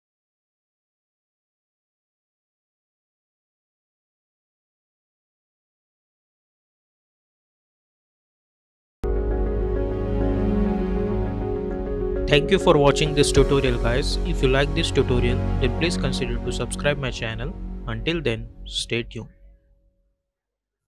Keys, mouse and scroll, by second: 0.2 space.